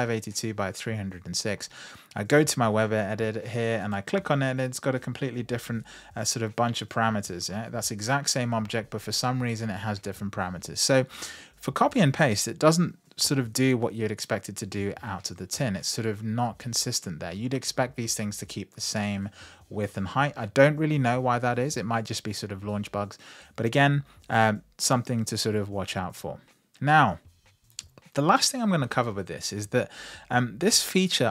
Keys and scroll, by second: 5.5 super+v.